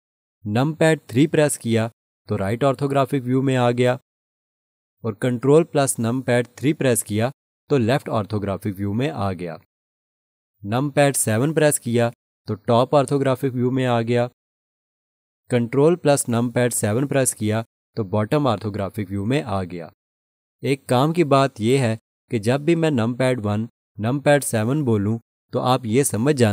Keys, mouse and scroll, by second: 1.9 3, 6.0 ctrl+3, 12.2 7, 17.1 ctrl+7, 25.3 1.